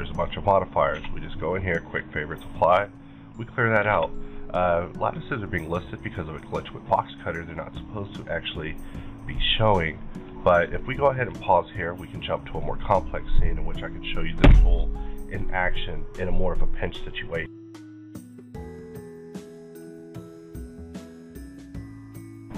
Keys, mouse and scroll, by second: 0.3 middle click, 0.9 q, 2.2 click, 3.2 middle click, 3.3 middle click, 3.6 scroll down 1, 3.9 alt+a, 5.5-14.6 middle drag.